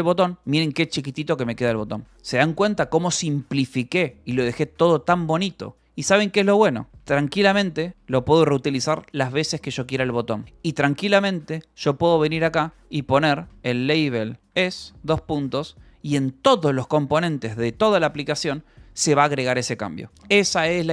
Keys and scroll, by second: 0.0-0.4 typing, 1.6 j, 4.8 j, 6.9-8.4 typing, 10.4 p, 11.9-15.1 typing, 15.4 Escape, 17.1 k, 17.9 k, 19.7 ctrl+k.